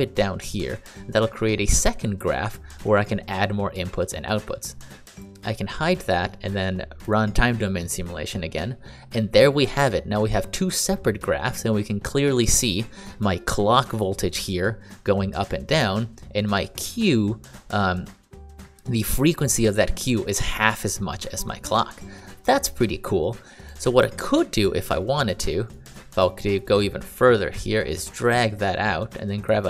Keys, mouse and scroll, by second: 5.1 click, 23.6 click, 24.9 click, 25.6 click, 25.8 click, 26.2 click, 28.3 click.